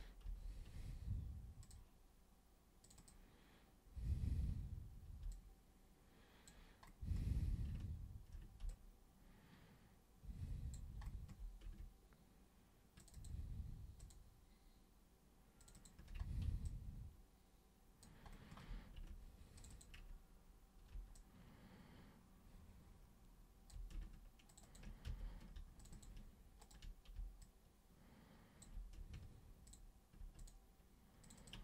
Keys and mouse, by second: 0.3 ctrl+super+z, 1.6 super+click, 2.8 super+click, 3.0 super+click, 5.3-6.5 alt+super+drag, 8.7-10.7 alt+super+drag, 13.0 ctrl+shift+super+click, 14.0 ctrl+shift+super+click, 15.6 ctrl+shift+super+click, 15.7 ctrl+shift+super+click, 16.6-18.0 alt+super+drag, 19.6 ctrl+shift+super+click, 19.7 ctrl+shift+super+click, 21.2-23.7 alt+super+drag, 24.5 ctrl+shift+super+click, 24.6 ctrl+shift+super+click, 25.1 ctrl+super+z, 25.8 ctrl+shift+super+click, 25.9 ctrl+shift+super+click, 26.6 ctrl+super+click, 27.4-28.6 alt+super+drag, 29.7 ctrl+click, 30.4 ctrl+shift+click, 31.2 ctrl+shift+click, 31.4 ctrl+shift+click.